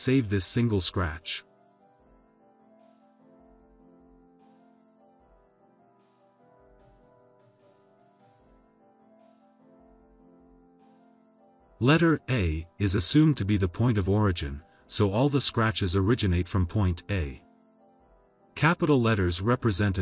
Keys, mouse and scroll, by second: 3.5 click, 4.2 click, 5.2 click, 5.8-8.8 typing, 9.1 click, 11.7 click, 13.0 click, 17.5 click, 19.4 Caps_Lock, 19.8 e.